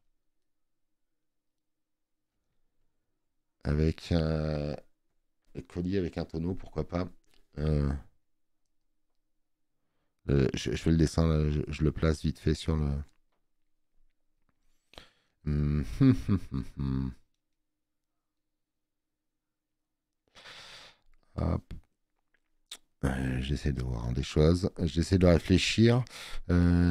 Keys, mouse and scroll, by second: 7.8 b, 21.2 space, 21.4 click, 25.4 space, 25.6 click.